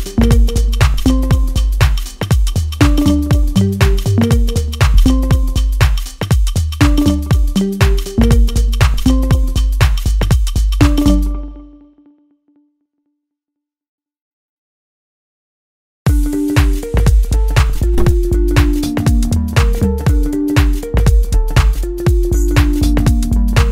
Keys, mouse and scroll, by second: 3.9 p, 5.0 click, 6.0-8.0 middle drag, 8.0-12.0 drag, 17.4-18.1 scroll down 1, 18.1 click, 22.5 scroll up 1, 22.8-23.7 middle drag.